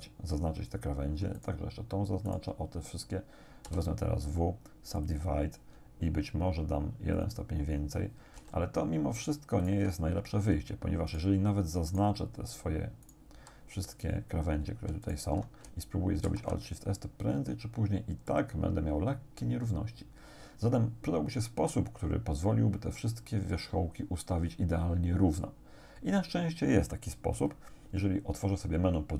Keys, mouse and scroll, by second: 1.4 shift+right click, 2.3 shift+right click, 3.7 w, 5.0 click, 7.2 click, 8.4 a, 9.6 alt+shift+right click, 11.1 alt+shift+right click, 12.0 alt+shift+right click, 13.1 alt+shift+right click, 15.1 alt+shift+right click, 16.3 alt+shift+s, 18.3-25.6 drag.